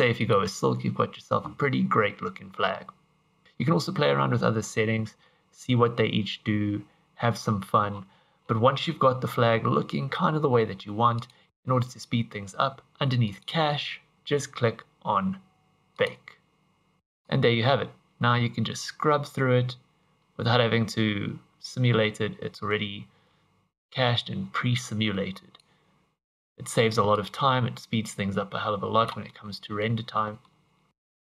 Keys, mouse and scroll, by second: 3.4 scroll down 6, 7.9-8.5 scroll down 13, 11.1 click, 11.5 scroll down 1, 11.7 scroll down 2, 13.3 click, 14.1 scroll down 1, 15.9 click, 17.3 click, 27.1 click, 29.3 middle click, 30.1 middle click, 30.9 scroll up 1.